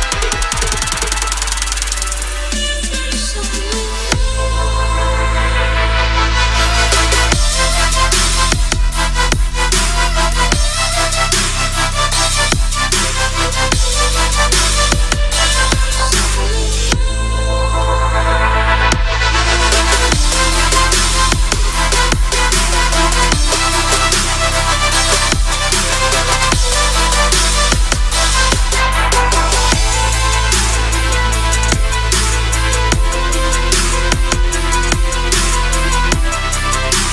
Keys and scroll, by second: 3.0 ctrl+-, 3.8 ctrl+=, 5.0 ctrl+u, 13.4 Return, 14.3 ctrl+b, 21.0 Return, 21.7 ctrl+-, 22.8 ctrl+m, 25.9 Return, 26.5 ctrl+-, 27.0 ctrl+=, 33.4 ctrl+-.